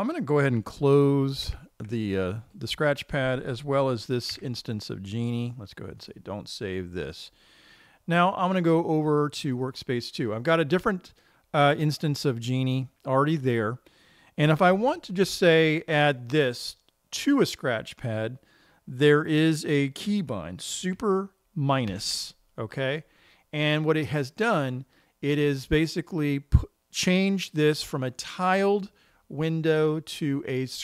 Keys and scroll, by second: 2.0 super+q, 4.8 super+q, 22.4 super+-.